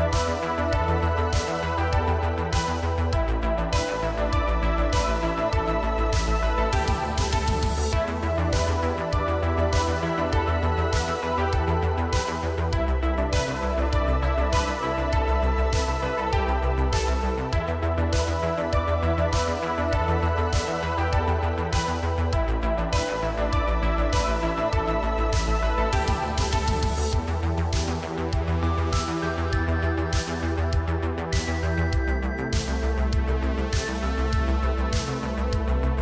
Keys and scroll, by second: 2.2 Tab, 8.1 Tab, 9.3 shift+s, 9.8 Tab, 10.7 Tab, 11.4 g, 13.2 shift+s, 14.2 Tab, 15.0 Tab, 15.3 2, 16.1 shift+s, 16.6 Tab, 17.1 Tab, 17.7 shift+s, 18.3 Tab, 19.5 Tab, 21.1 2, 28.8 shift+s, 29.3 Tab, 30.9 Tab, 31.8 Tab, 32.4 Tab, 32.9 shift+s.